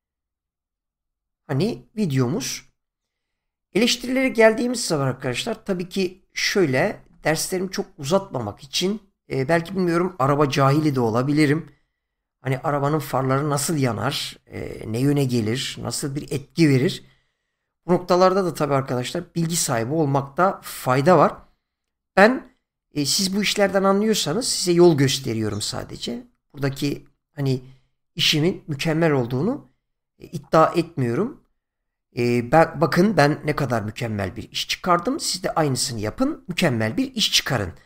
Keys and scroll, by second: 7.1 space.